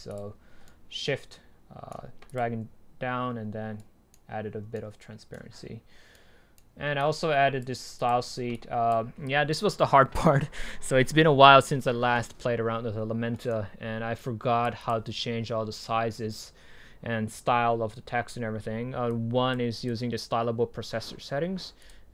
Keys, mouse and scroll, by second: 2.4-3.0 drag, 3.0-3.8 scroll down 2, 3.8-4.1 drag, 5.4-7.0 right drag, 7.0-11.0 drag, 13.4-14.2 right drag, 14.2-15.8 drag, 19.2-21.9 drag.